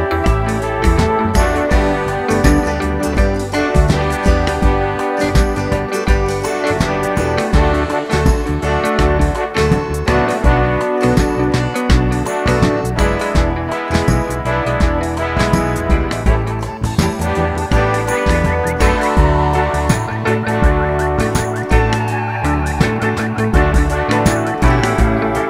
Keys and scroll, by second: 15.4 d, 18.3-19.2 typing, 20.4-21.1 scroll up 1, 20.4 typing.